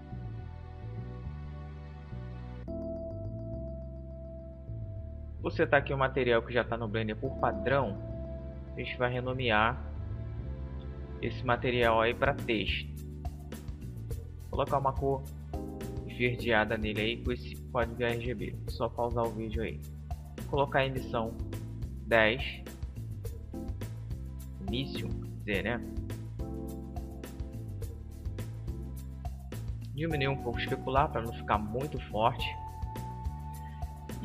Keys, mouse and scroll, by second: 1.1-2.6 middle drag, 2.6 right click, 3.3-4.9 drag, 9.0 click, 13.5-15.3 drag, 19.2-21.2 drag, 27.9-29.8 drag, 33.3-34.2 drag.